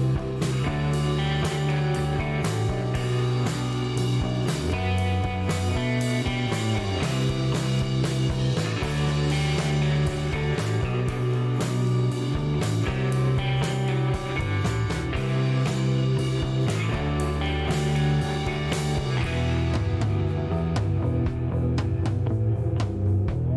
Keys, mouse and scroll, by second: 0.0-0.3 typing, 1.7 click, 2.4 scroll down 1, 3.5 click, 3.9 space, 4.3 right click, 4.8 click, 6.0-6.3 scroll up 1, 8.4 click, 10.8 BackSpace, 11.0 1, 13.9 BackSpace, 15.8 click, 18.5-21.4 drag.